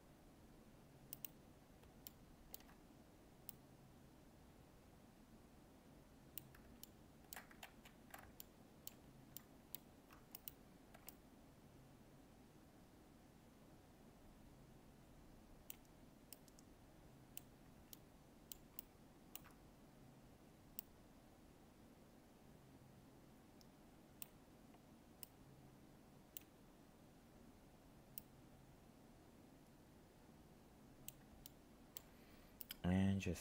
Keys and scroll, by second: 7.6 ctrl+z.